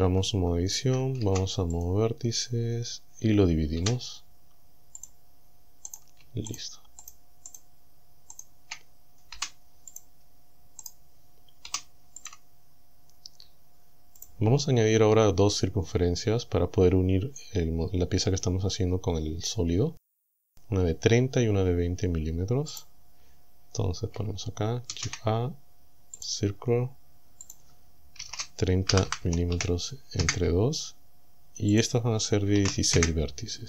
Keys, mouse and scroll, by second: 0.1 Tab, 1.2 ctrl+Tab, 1.8 ctrl+click, 3.8 w, 5.0 click, 5.9 right click, 6.6 shift+right click, 7.0 shift+right click, 7.5 shift+right click, 8.4 shift+right click, 9.4 Delete, 10.0 click, 10.9 right click, 11.7 Delete, 12.2 click, 14.2 click, 22.8 click, 25.0 shift+a, 26.2 click, 27.5 click, 28.3 KP_0, 28.9 m, 29.2 KP_Divide, 29.6 KP_2, 30.2 KP_Enter, 31.8 click, 32.5 KP_1, 32.6 KP_6.